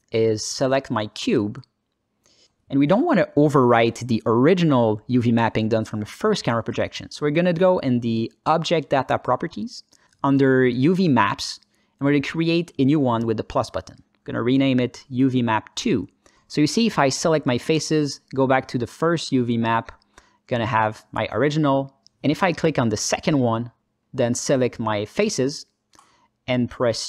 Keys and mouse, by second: 0.7 alt+middle click, 1.5 alt+shift+middle click, 3.2 alt+shift+z, 14.2-16.1 drag, 18.1 Tab, 18.4 click, 19.3 ctrl+alt+middle click, 20.5 click, 24.5 click, 26.5 u.